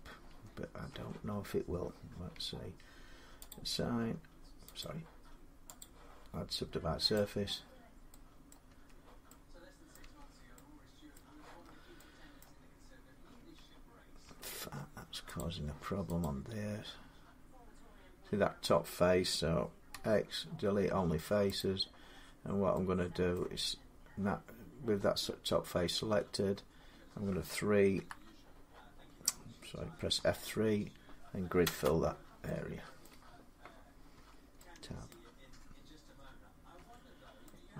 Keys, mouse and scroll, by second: 0.0 Tab, 0.7 Tab, 2.1 Tab, 3.3 click, 4.6 click, 5.6 click, 6.9 click, 8.3 middle click, 8.5 Tab, 9.7 middle click, 9.8 Tab, 10.9 middle click, 12.2 middle click, 12.6 click, 12.6 click, 13.1 Tab, 14.0 Tab, 14.4 scroll up 2, 15.1 click, 15.1 scroll down 2, 16.0 click, 19.7 x, 21.4 click, 23.1 middle click, 26.4-28.3 middle drag, 27.7 3, 29.9 F3, 31.4 Return, 32.8-34.9 middle drag, 33.9 Tab, 36.5 Tab.